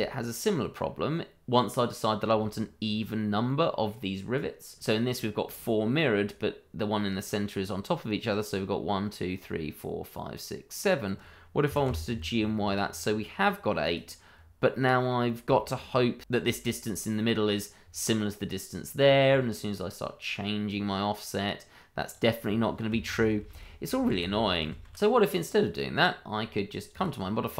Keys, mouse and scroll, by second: 3.4 middle click, 11.6 g, 11.8 y, 13.8 click, 14.6 middle click, 15.2 scroll up 1, 15.5 shift+middle click, 15.6 middle click, 15.7 shift+middle click, 17.1 middle click, 19.0 scroll down 1, 19.3 middle click, 20.6 click, 23.1 ctrl+z, 25.3 click, 25.9 scroll up 1, 26.9 click.